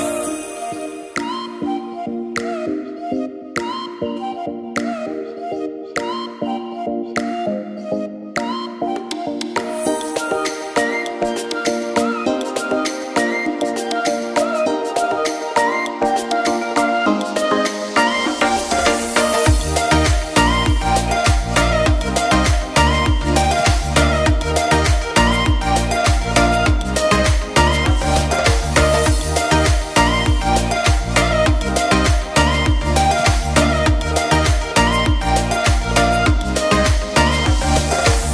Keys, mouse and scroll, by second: 0.0 click, 0.4 shift+a, 1.4 g, 2.3 middle drag, 2.5 scroll down 1, 2.6-3.0 middle drag, 3.0-3.5 scroll up 2, 3.5-4.0 scroll down 4, 4.0 click, 4.4-5.4 shift+middle drag, 5.4 g, 6.4 click, 6.8 middle click, 7.3 KP_0, 7.8 click, 8.7 click, 9.3 KP_0, 10.6 click, 11.2 click, 13.6 click, 14.7 click, 16.4 g, 16.5 z, 16.9 scroll down 2, 17.1 click, 17.4 g, 18.0 click, 18.4 KP_0, 18.7 KP_0, 18.9-19.3 ctrl+middle drag, 19.3 click, 19.8 click, 21.0 KP_0, 22.7 click, 23.5 click, 24.5 click, 26.2 click, 26.8-28.0 drag, 29.1 click, 31.4 click, 31.7 click, 32.3 click, 36.8-37.1 drag.